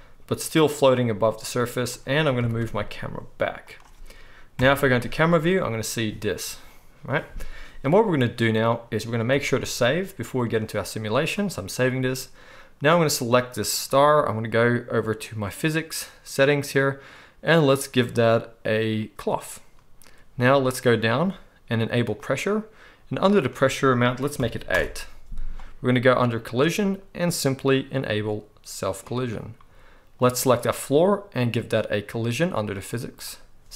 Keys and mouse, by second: 1.2-5.4 drag, 2.5 g, 4.5 KP_0, 5.4-15.4 right drag, 9.4 ctrl+s, 12.9 click, 12.9 middle click, 15.4 middle click, 15.5-19.2 drag, 19.2-22.3 middle drag, 22.3-23.3 drag, 23.3-29.0 middle drag, 29.0-33.2 drag, 33.2-33.7 middle drag.